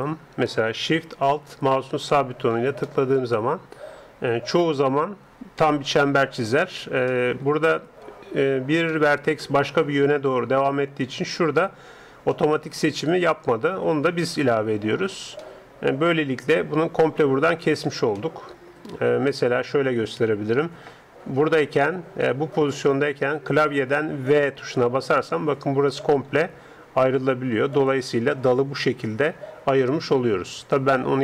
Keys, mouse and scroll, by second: 1.9-3.8 right drag, 3.1-4.6 middle drag, 5.5-8.8 middle drag, 9.1-10.5 middle drag, 12.3-14.0 middle drag, 14.3-16.1 right drag, 15.4-17.2 middle drag, 18.2-22.9 middle drag, 24.3 v, 27.8 ctrl+l, 29.2 g.